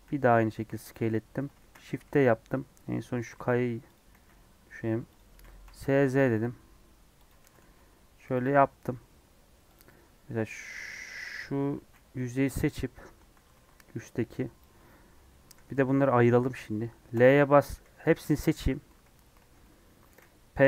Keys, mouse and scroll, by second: 0.0 s, 1.5 shift+d, 3.3 g, 4.1 s, 5.4 s, 7.4 g, 9.7 click, 9.8-10.2 scroll up 1, 10.5 scroll down 2, 10.6-12.5 middle drag, 12.5 KP_3, 13.4 alt+z, 14.5 click, 14.7 Tab, 15.0 Tab, 15.6 scroll down 1, 15.8-17.1 middle drag, 17.1 l, 17.6 scroll down 1, 18.0 Tab, 18.6 Tab, 18.8 a, 19.3 alt+z, 19.5-20.6 middle drag.